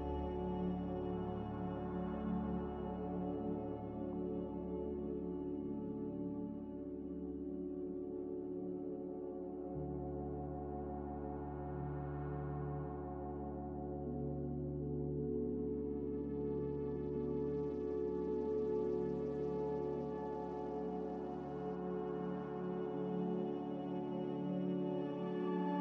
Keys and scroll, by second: 10.5 z, 15.7 F9, 16.2 a, 17.0 a, 22.8-23.6 typing.